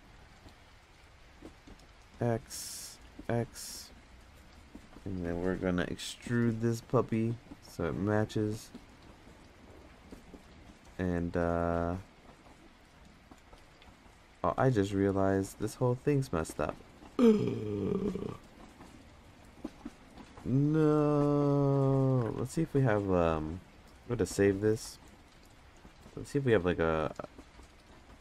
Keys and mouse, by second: 1.1 x, 2.4 click, 2.9 x, 3.8 click, 7.1 e, 9.2 middle drag, 9.6 Tab, 10.2 click, 11.4 middle click, 20.0 ctrl+z, 20.5 ctrl+z, 21.0-22.2 ctrl+z, 23.8 ctrl+s, 25.1 ctrl+z, 25.1 ctrl+s, 26.2-28.2 drag.